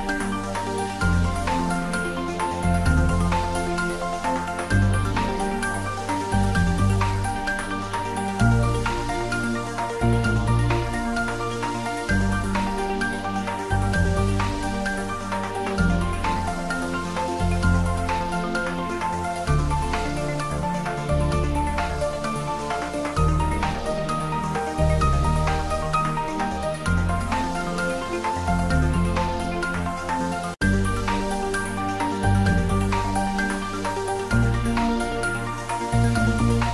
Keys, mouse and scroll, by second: 1.3 click, 3.4 click, 4.6 click, 6.2 click, 7.5 click, 8.8 click, 10.6 ctrl+s, 14.2 click, 15.7-19.0 drag, 19.1-19.7 scroll down 1, 19.7 middle click, 20.6 scroll up 1, 21.9-24.3 drag, 24.3-25.2 scroll down 1, 25.8 click, 28.5 click, 29.5 click, 34.0 click, 36.6 click.